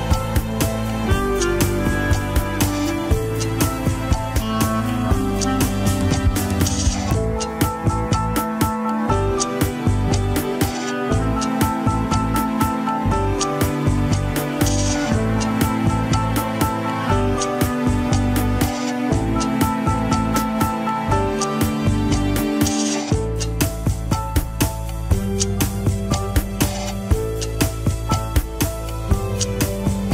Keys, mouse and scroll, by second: 0.7 ctrl+click, 1.2 Tab, 1.7 click, 2.4 Tab, 3.5 ctrl+click, 4.3 Tab, 4.7 click, 5.3 Tab, 6.1 ctrl+click, 6.6 Tab, 7.3 click, 7.9 Tab, 8.7 ctrl+click, 9.1 Tab, 9.8 click, 10.2 click, 10.9 Tab, 11.8 ctrl+click, 12.2 Tab, 12.8 click, 13.4 Tab, 14.4 ctrl+click, 14.9 Tab, 15.7 click, 16.5 Tab, 17.3 ctrl+click, 17.8 Tab, 18.4 click, 19.1 Tab, 19.9 ctrl+click, 20.4 Tab, 21.1 click, 22.9 scroll down 1, 23.2 shift+middle click, 23.8 Tab, 24.9 ctrl+click, 25.4 Tab, 26.1 click, 26.7 Tab, 27.8 ctrl+click, 27.8 scroll up 1, 28.1 shift+middle click, 28.5 Tab, 29.2 click, 29.8 Tab.